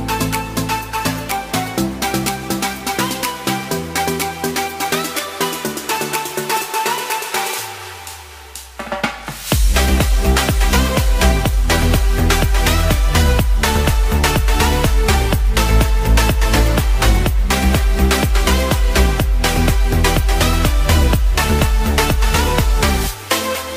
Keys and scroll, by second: 10.8 x, 14.2 typing, 20.7 space.